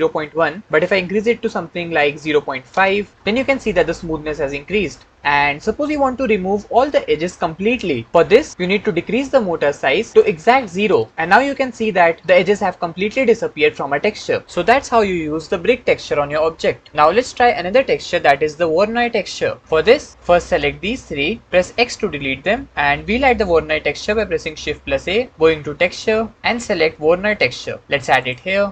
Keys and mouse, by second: 10.1 click, 20.5-21.5 drag, 21.6 x, 24.8 shift+a.